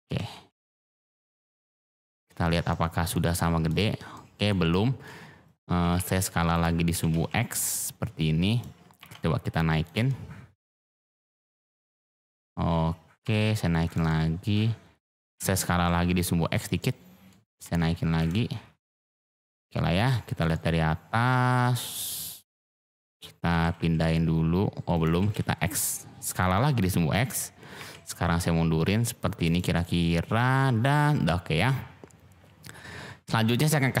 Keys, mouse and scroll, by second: 0.0 g, 0.3 y, 1.6 click, 2.0-2.5 drag, 2.7 shift+click, 3.3 shift+click, 4.1 shift+click, 4.7 shift+click, 5.8 g, 5.9 x, 6.5 click, 6.9 s, 7.1 x, 8.5 click, 8.9 g, 9.1 z, 9.8 click, 10.0-10.5 drag, 11.2-12.0 drag, 12.0 shift+middle drag, 12.1 shift+click, 13.2 g, 13.3 z, 13.8 click, 14.1-15.0 drag, 15.3 s, 15.6 x, 16.5 click, 16.8-17.3 drag, 17.5 g, 17.6 z, 18.1 click, 19.1-19.9 middle drag, 20.5 middle drag, 20.7-21.0 drag, 21.0 middle drag, 21.3 click, 22.5-23.1 middle drag, 23.5 g, 23.7 x, 24.9 click, 25.0 s, 25.3 x, 26.4 click, 27.7 g, 28.0 y, 29.4 drag, 29.8-31.3 middle drag.